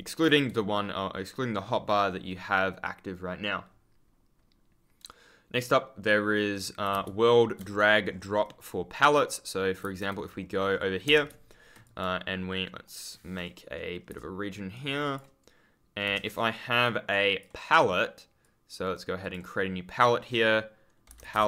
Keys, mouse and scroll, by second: 6.8 w, 7.0 ctrl+space, 7.6 ctrl+F10, 8.0-8.4 scroll up 1, 9.0-9.7 scroll up 1, 9.7 w, 10.1 F10, 10.2-11.0 scroll up 1, 11.8 click, 12.8 right click, 14.0 Return, 14.7 click, 17.0 click, 18.3 click, 18.7 right click, 19.1 click, 20.9-21.4 typing.